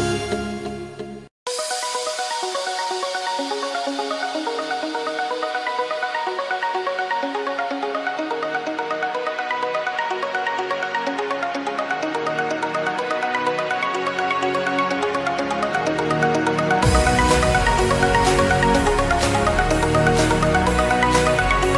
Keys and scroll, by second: 0.4 ctrl+space, 3.4 b, 6.3 0, 7.9 z, 8.4 space, 9.1 z, 9.4 space, 13.0 x, 14.2 ctrl+z, 15.7 ctrl+z, 17.1 3.